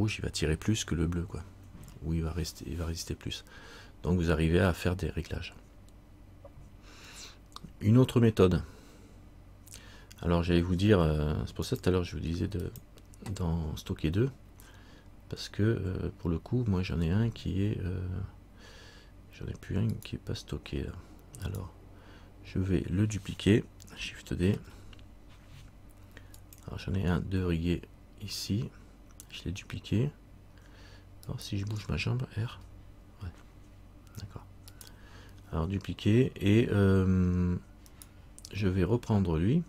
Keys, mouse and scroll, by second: 7.5-8.1 scroll down 1, 11.8 click, 17.0-20.1 scroll down 1, 20.1 right click, 24.6 shift+d, 31.4 right click, 32.6 r, 38.1 right click.